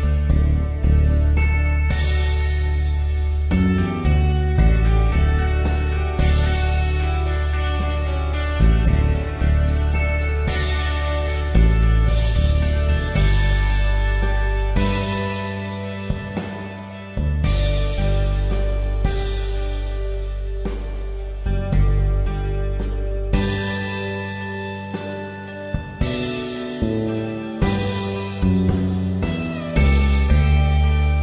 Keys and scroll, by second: 4.2 space, 5.3 ctrl+d, 5.7 ctrl+alt+z, 6.8 ctrl+alt+z, 8.6 ctrl+d, 8.7 space, 12.1 s, 13.7 space, 15.0 ctrl+alt+z, 16.1 ctrl+alt+z, 17.0 space, 19.0 space, 19.5 ctrl+alt+z, 21.4 space, 22.3 ctrl+alt+z, 23.5 ctrl+alt+z, 27.1 space, 28.8 s.